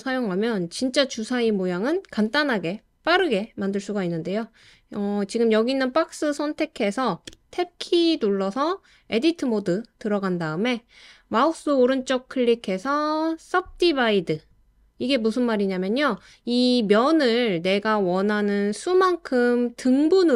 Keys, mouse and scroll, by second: 7.3 Tab, 11.9 right click, 17.8 click, 19.8 click.